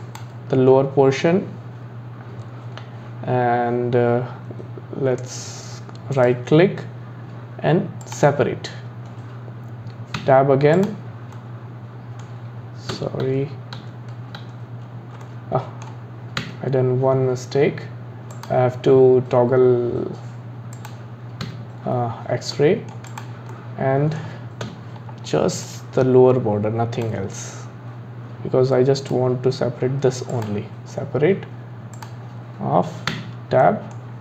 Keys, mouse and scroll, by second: 6.1-9.3 right drag, 10.2 Tab, 10.7 click, 11.3-13.3 middle drag, 13.3 ctrl+z, 13.8 ctrl+z, 14.4 ctrl+z, 15.2-16.4 middle drag, 16.4 Tab, 18.4-20.9 drag, 21.5 Tab, 22.6 middle click, 23.1 click, 23.5-24.7 middle drag, 24.7 KP_1, 25.6 click, 29.0-31.9 right drag, 31.9-33.1 drag, 33.1 Tab, 33.6-34.1 middle drag, 34.1-34.2 scroll down 5.